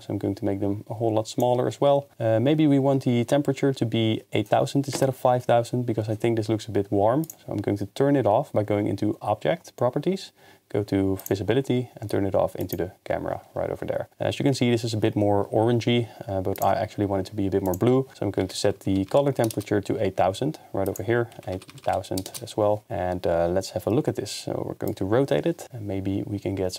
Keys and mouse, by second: 4.9 KP_0, 12.6 click, 17.7-19.5 drag, 18.9 0, 20.9-22.3 drag, 21.7 0, 21.8 0, 24.9-26.7 drag.